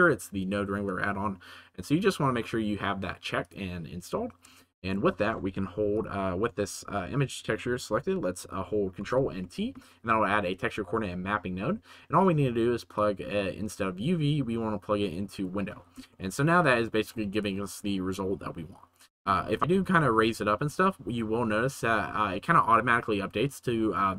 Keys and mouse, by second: 4.6 shift+middle click, 5.9 middle click, 9.0 ctrl+t, 9.5 middle click, 13.0 click, 13.5 click, 16.1 shift+middle click, 17.1-17.7 shift+middle drag, 19.4 shift+middle click, 19.7 g, 19.9 z.